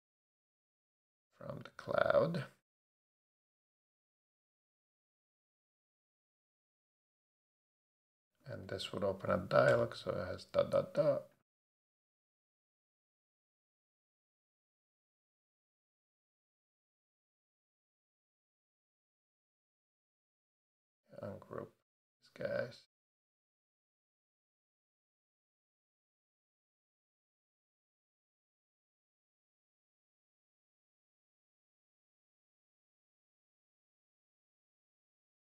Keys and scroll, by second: 8.4 Return, 8.7 Right, 9.3 ., 9.7 BackSpace, 13.2 Left, 14.2 shift+Left, 17.9 Down, 19.8 super+a, 29.5 super+d, 30.3 shift+super+d, 30.6 shift+Left, 31.0 shift+Down, 33.5 shift+Down, 34.1 shift+Up.